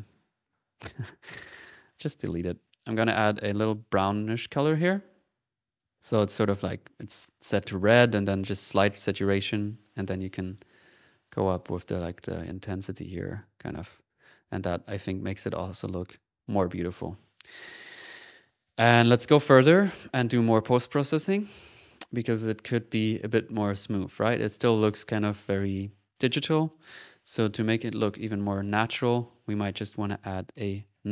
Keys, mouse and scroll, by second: 0.1 ctrl+x, 0.5 ctrl+z, 0.6-1.4 typing, 1.2 ctrl+click, 3.8-6.4 drag, 7.9-9.3 drag, 9.5 click, 14.7 click, 15.1 click, 15.9 click, 16.4 click, 17.2 click, 17.6 click, 18.1 right click, 18.5 click, 18.9 click, 20.1 click, 21.3 click, 21.9 right click, 22.4 middle click, 22.7 middle click, 23.1 middle click, 23.5 click, 26.1 click, 29.6 click, 30.0 middle click, 30.8 right click.